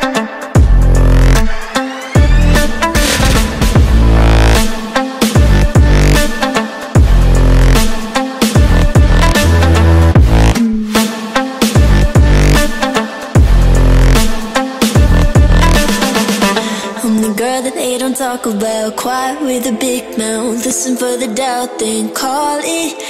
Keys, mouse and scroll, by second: 0.6 click, 1.3 click, 2.8 right click, 3.8 click, 4.7-5.6 typing, 6.4 Tab, 8.3 click, 9.5 click, 10.3 click, 11.3 click, 12.3 click, 12.9 click, 14.0 click, 14.8 click, 15.4 click, 16.0 click, 17.0 click, 17.6 click, 19.2 click, 20.1 click, 21.6 click, 22.5 click.